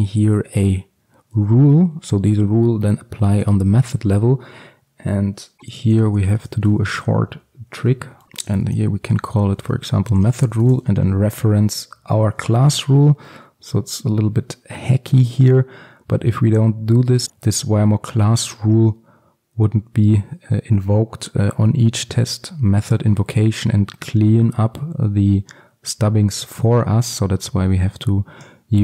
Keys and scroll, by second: 0.6 Return, 11.8 Return, 12.7 ctrl+alt+super+l.